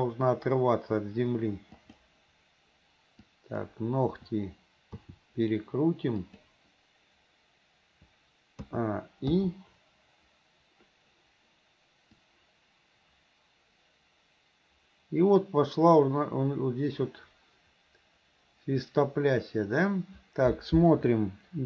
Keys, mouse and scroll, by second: 3.3 click, 4.2 e, 5.0 r, 8.7 a, 9.4 i, 12.3-21.6 drag.